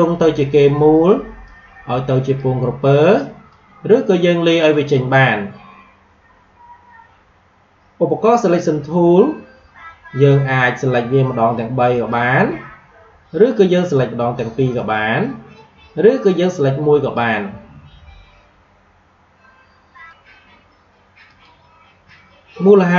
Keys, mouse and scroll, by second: 1.3-22.9 drag.